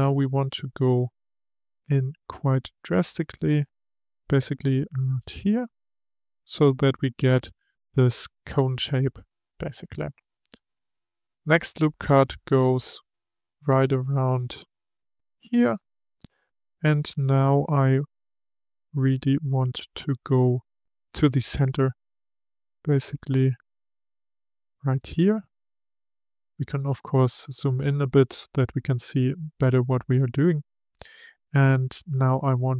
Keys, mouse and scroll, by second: 1.3 s, 14.9 click, 21.3 s, 25.6-26.4 scroll up 1, 26.4-28.5 shift+middle drag, 28.5-31.9 scroll up 2.